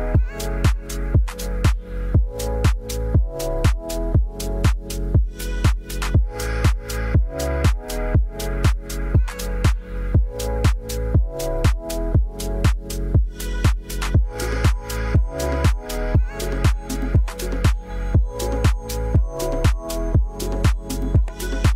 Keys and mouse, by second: 2.1 s, 3.2 BackSpace, 6.4 middle click, 7.3 click, 9.9 click, 10.2 Tab, 12.0 Tab, 12.4 click, 17.0 click, 18.4 click, 18.8 Tab, 20.6 click.